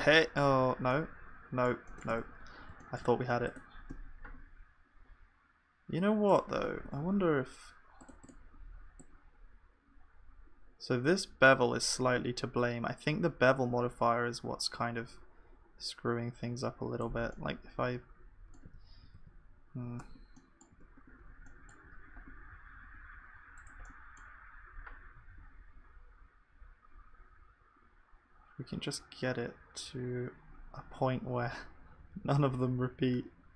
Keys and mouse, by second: 0.5 ctrl+s, 2.1 Tab, 3.4-6.7 drag, 3.4-5.4 middle drag, 3.4-5.4 right drag, 3.9 g, 6.7 Tab, 18.5-20.0 middle drag, 18.8 ctrl+z, 20.0 Tab, 20.4-25.3 middle drag, 20.7 Tab, 21.8 a, 22.5 s.